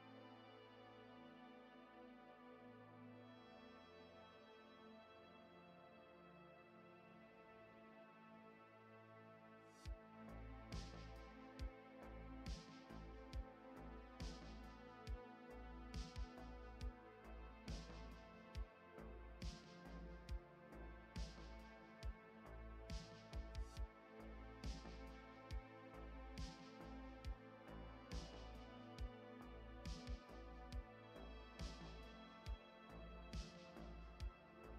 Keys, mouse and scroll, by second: 0.2 shift+middle click, 0.4 scroll up 2, 1.1 shift+middle click, 1.3-4.3 typing, 4.9 shift+middle click, 5.2 shift+middle click, 5.2 scroll up 1, 5.6 shift+d, 6.8 shift+middle click, 7.2 scroll down 1, 7.3-12.3 typing, 12.9 middle click, 17.4 alt+z, 18.0 middle click, 21.0 click, 23.8 middle click, 27.2-28.3 scroll down 3, 28.3-28.8 scroll down 2, 28.8 middle click, 31.4 click, 32.4 click.